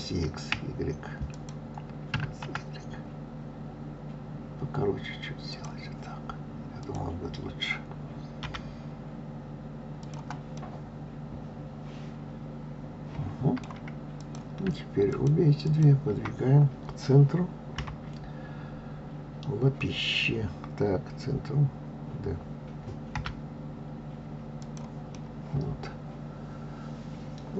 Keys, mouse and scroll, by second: 1.3 click, 2.1 s, 6.8 click, 8.4 g, 10.5-13.6 middle drag, 14.1 click, 15.1 shift+click, 15.6 shift+click, 17.7 KP_3, 25.1-27.5 middle drag.